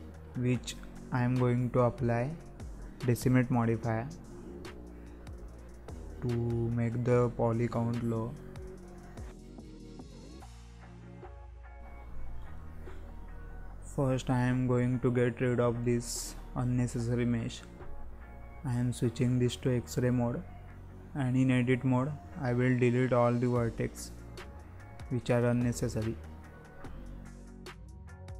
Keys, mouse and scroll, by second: 0.5 z, 1.5-2.0 scroll up 4, 2.0-2.4 shift+middle drag, 2.4-2.8 scroll up 4, 2.8-3.2 middle drag, 3.2-3.5 scroll down 1, 3.5-3.9 shift+middle drag, 3.9-4.2 scroll up 4, 4.2-5.0 middle drag, 5.0-5.7 scroll up 2, 5.7-6.0 scroll up 2, 6.0-6.5 scroll down 6, 6.9 scroll down 4, 7.1-7.4 shift+middle drag, 7.4-7.8 scroll up 3, 7.8-9.2 middle drag, 9.2-9.6 scroll down 3, 9.6-10.1 shift+middle drag, 10.1-10.4 scroll up 1, 10.4-11.4 middle drag, 11.4-11.8 scroll down 1, 11.8-12.2 middle drag, 12.2 scroll down 2, 12.5-12.8 shift+middle drag, 12.8-13.1 scroll up 1, 13.1-14.1 middle drag, 14.1 KP_7, 14.6-15.0 scroll down 2, 15.0 z, 16.2 scroll down 2, 17.6 click, 18.0-18.9 scroll up 2, 18.9-19.2 scroll down 1, 19.2 click, 19.5-19.9 scroll up 1, 19.9 click, 20.5 scroll down 1, 22.8 Tab, 23.1-23.5 scroll down 1, 23.5 click, 24.0-24.6 scroll up 3, 24.6 shift+middle click, 25.5 click.